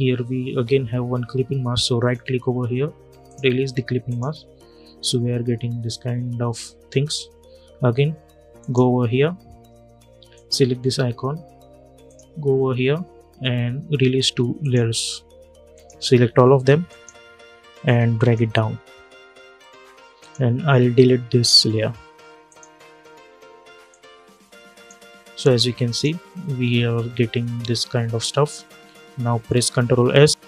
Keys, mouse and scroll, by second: 1.7 right click, 3.0 click, 8.3 click, 14.3 click, 16.6 shift+click, 17.8 click, 22.2-25.6 drag, 23.9 click, 29.6 ctrl+s, 30.3 click.